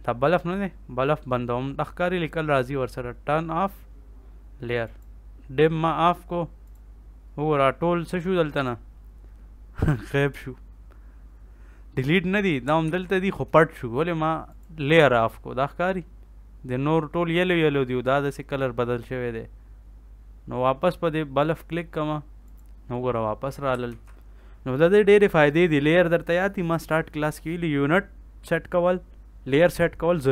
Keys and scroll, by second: 12.7 ctrl+s, 23.8 ctrl+s.